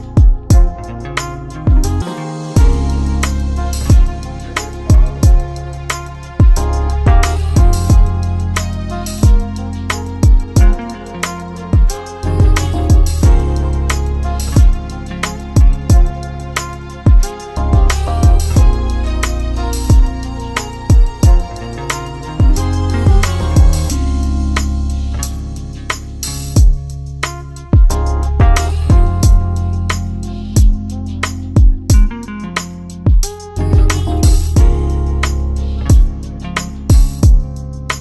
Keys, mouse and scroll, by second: 0.1 click, 2.2 ctrl+shift+click, 9.4 Up, 10.4 click, 13.9 click, 15.7 shift+click, 18.4 click, 19.5 click, 20.8 click, 21.7 shift+click, 24.5 click, 26.5 click, 27.5 shift+click, 30.5 click, 32.0 click, 33.4 click, 34.6 click, 36.6 right click.